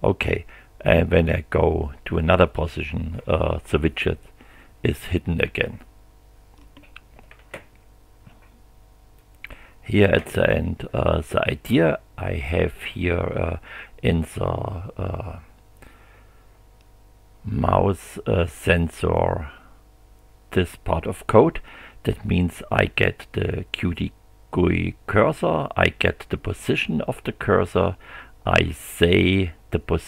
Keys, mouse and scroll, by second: 0.8 click, 9.2 click.